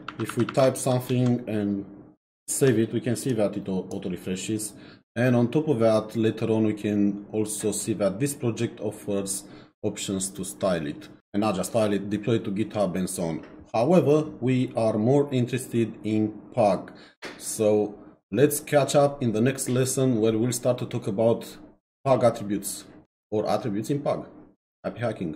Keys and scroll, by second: 0.1 shift+1, 1.1 ctrl+s.